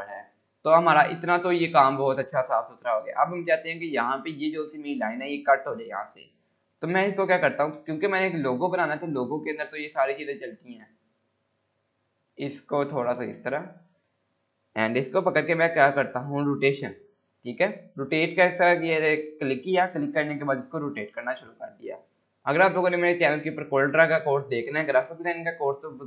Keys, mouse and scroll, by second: 0.2 click, 3.7-4.6 scroll up 1, 6.6 click, 9.3 scroll down 1, 10.4-12.8 drag, 22.7 scroll up 1, 23.7-25.9 drag.